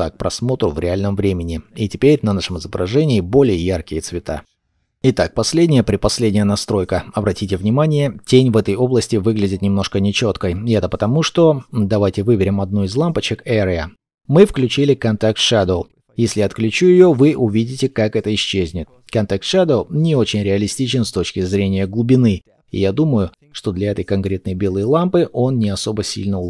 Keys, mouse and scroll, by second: 1.3 KP_0, 6.4-8.8 scroll up 1, 8.8 scroll down 1, 14.5-15.1 scroll down 1, 16.7 double click, 18.0 scroll down 1, 18.5 shift+middle click, 19.3-20.1 scroll up 1, 22.9-24.2 scroll up 1, 24.2 scroll down 1, 26.1-26.4 scroll up 1.